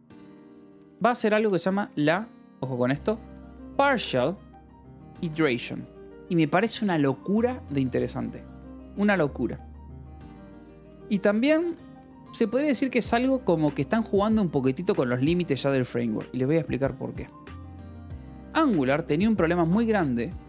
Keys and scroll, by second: 0.7 space, 1.1 e, 1.2 space, 2.7-6.4 typing, 10.3 Return, 11.0 Escape, 11.5 a, 18.4 space.